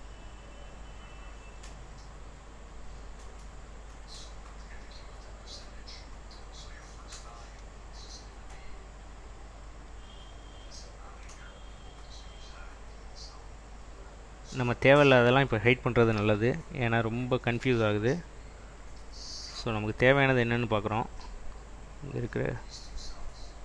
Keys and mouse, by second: 9.3 click, 16.3 g, 18.7 Escape.